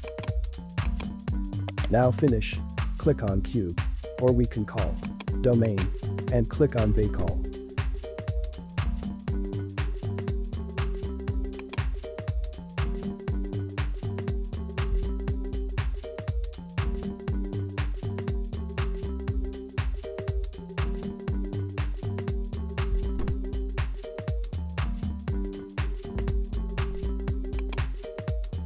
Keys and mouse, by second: 0.0 click, 0.8 click, 1.7 right click, 2.4 h, 3.5 ctrl+z, 5.1 click, 5.6 click, 8.7-11.1 drag, 11.6-26.1 drag, 27.6 click, 28.2 space.